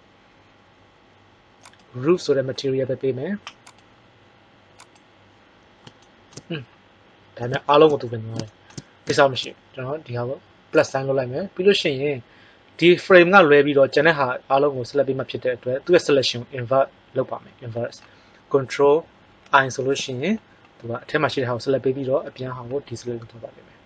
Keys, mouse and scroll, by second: 3.6 click, 10.8-11.2 drag, 12.4 click, 19.3 ctrl+i.